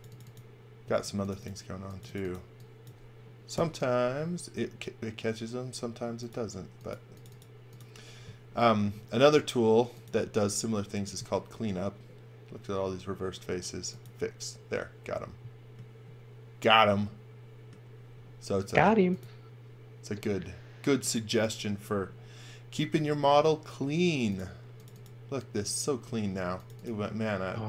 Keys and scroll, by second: 0.8 space, 3.5 BackSpace, 27.5 x.